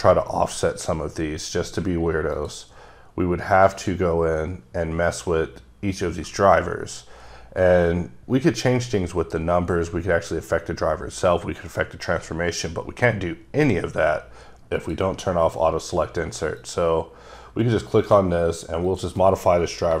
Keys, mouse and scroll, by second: 2.4 click, 3.8 click, 14.8 click, 14.9 click, 16.6 click, 18.0 click, 18.9 click, 19.9 Delete.